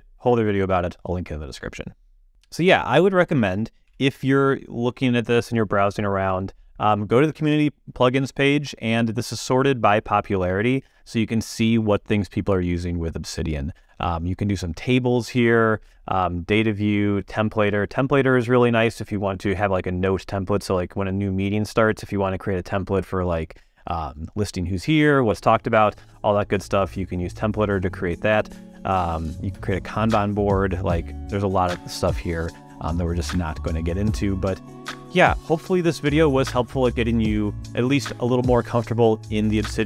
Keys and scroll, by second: 3.8 super+,.